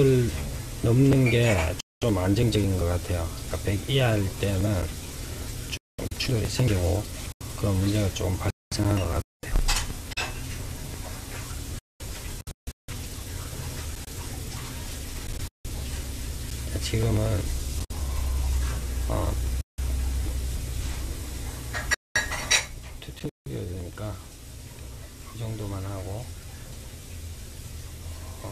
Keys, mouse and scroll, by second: 9.9-12.7 scroll down 1, 21.2 click, 23.1-25.7 middle drag, 25.7-28.5 drag.